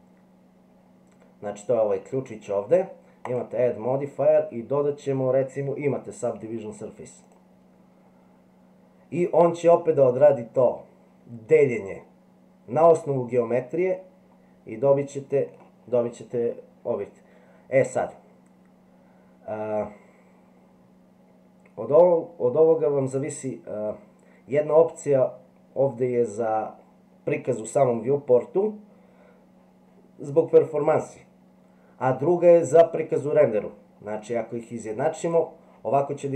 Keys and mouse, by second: 3.4-7.3 drag, 13.8-15.5 middle drag.